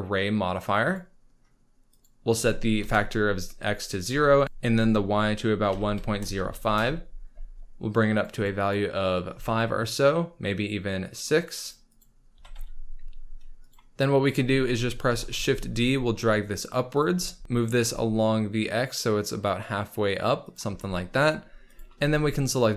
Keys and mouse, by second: 2.0-6.7 drag, 8.2 click, 8.6 click, 11.0 click, 11.6 click, 11.9 click, 12.3 g, 12.5 y, 14.3 click, 15.0 shift+d, 15.3 z, 16.9 shift+drag, 17.4 g, 17.4 y, 21.6 shift+click.